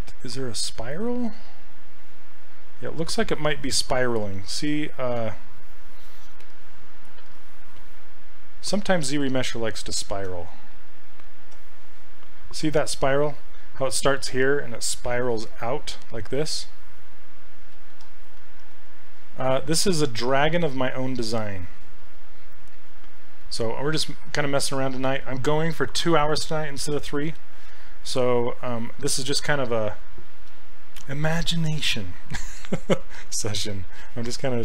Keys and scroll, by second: 17.8 ctrl+z.